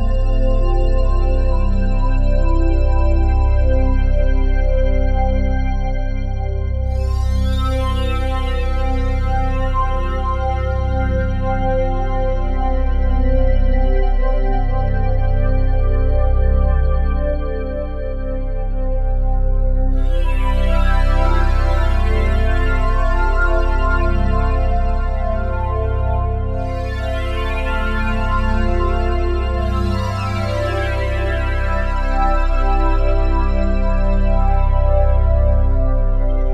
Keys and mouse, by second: 3.5-7.5 drag, 8.9-11.6 drag, 12.7-14.1 drag, 17.0-21.1 drag, 22.0-23.1 drag, 25.1-28.2 drag, 29.7-32.1 drag, 34.0 click.